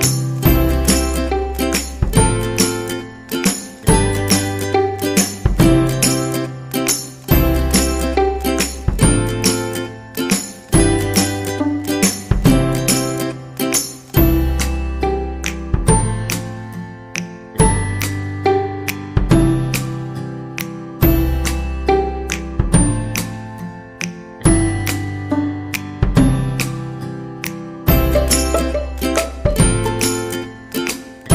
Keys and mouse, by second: 0.3 r, 1.3 r, 2.6 g, 5.0 c, 6.1 g, 7.2 right click, 7.4 g, 11.1 c, 13.2 g, 14.4 ctrl+z, 15.3 right click, 15.5 c, 16.4 g, 17.2 r, 18.8 right click, 18.9 g, 19.9 shift+middle click, 20.8 alt+z, 23.3 right click, 23.9 shift+right click, 24.1 middle click, 27.4 middle click, 29.0 middle click, 30.6 KP_3, 31.1 shift+middle click.